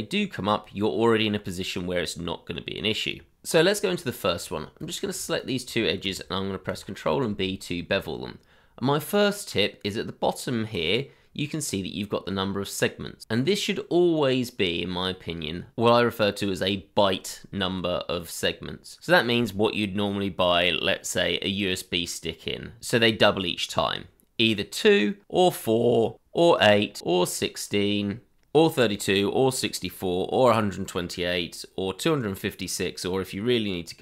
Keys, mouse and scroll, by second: 3.8 Tab, 5.4 shift+click, 6.7 ctrl+b, 13.2-13.6 scroll up 1, 13.6-15.7 scroll down 1, 22.3 scroll down 1, 22.9-25.6 scroll up 1, 25.6-26.1 scroll down 1, 26.1-27.0 scroll up 1, 28.1 scroll down 1.